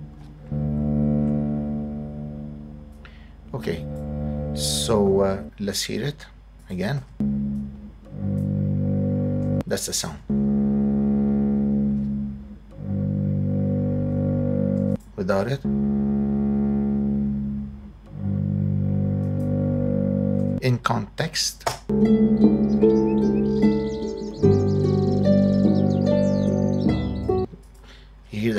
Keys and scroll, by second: 0.7 super+=, 5.3 space, 7.0 space, 9.4 space, 14.7 space, 20.4 space, 21.7 space, 27.3 space.